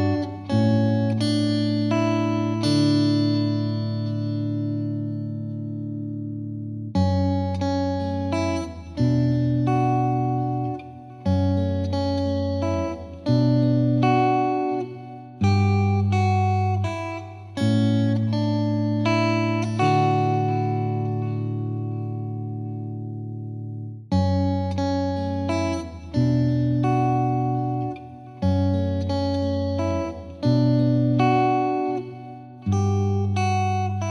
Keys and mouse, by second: 0.3 click, 0.7 click, 1.1 click, 1.7 click, 3.9 click, 5.3 click, 6.2 click, 6.7 click, 7.8 click, 8.6 click, 9.1 click, 9.3 click, 9.7 click, 10.6 click, 12.1 click, 13.2 click, 14.2 click, 14.4 click, 14.7 Delete, 18.7 click, 19.9 click, 20.5 click, 21.2 click, 21.6 click, 22.8 click, 23.4 right click, 25.1 click, 26.1 click, 26.4 click, 27.6 click, 28.2 click, 28.6 click, 28.8 click, 29.2 click, 31.0 click, 32.3 click, 32.5 click, 32.9 click, 33.1 ctrl+click, 33.2 ctrl+click, 33.7 click.